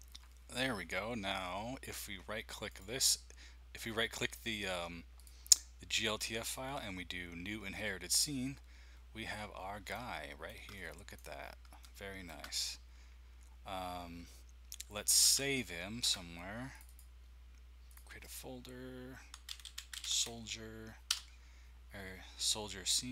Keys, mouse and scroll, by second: 2.7 click, 5.1 click, 6.3 click, 8.1 click, 9.2-10.5 scroll up 1, 11.4-12.3 scroll down 1, 15.3 ctrl+s, 16.7-19.3 drag, 19.1-20.6 typing, 21.1 Return.